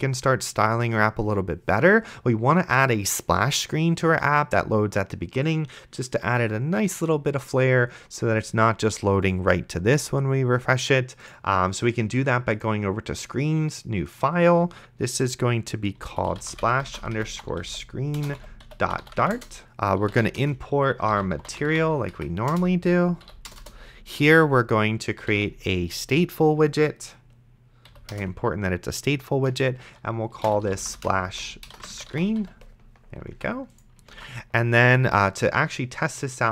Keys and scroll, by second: 15.9-22.5 typing, 22.5 Return, 23.2 End, 23.5 Return, 25.2 s, 25.6 t, 27.9 Down, 28.1 Return, 30.2-32.9 typing, 33.3 Escape, 34.4 ctrl+s.